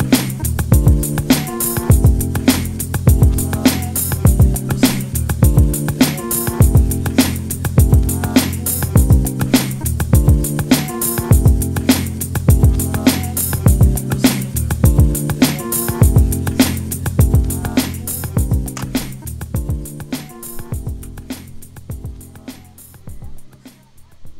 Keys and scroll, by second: 1.1 space, 17.6 space.